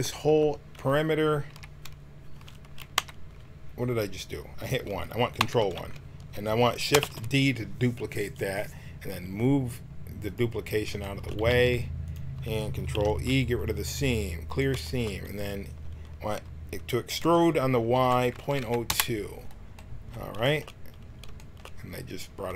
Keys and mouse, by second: 1.6 KP_1, 2.9 KP_1, 7.0 shift+d, 11.4 g, 12.9 ctrl+e, 16.4 middle click, 17.2 e.